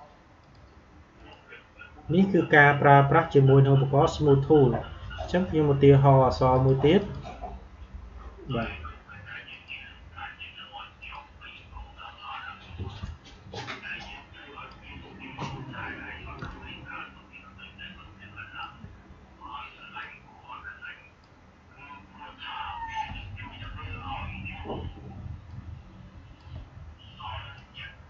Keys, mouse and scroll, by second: 6.4-16.3 drag, 16.3 space, 19.9-25.4 drag, 25.4-28.0 shift+drag.